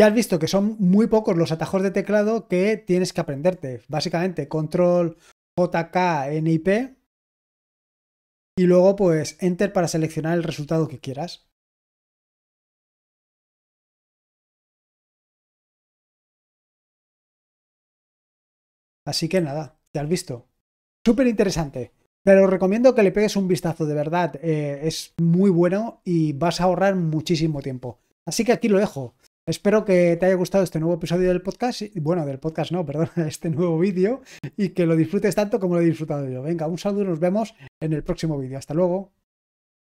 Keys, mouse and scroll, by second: 1.0-1.8 scroll up 1, 1.8-2.7 scroll down 1, 10.6-11.6 drag, 12.2 ctrl+p, 13.0-17.5 typing, 19.3 ctrl+c, 19.8 ctrl+l, 39.8 click.